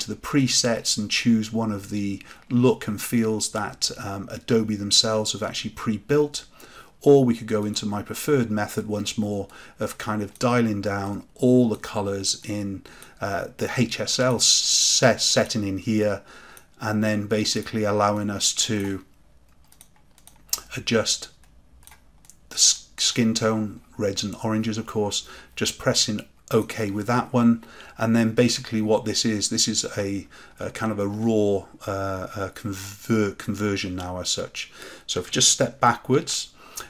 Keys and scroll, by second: 36.0 ctrl+z.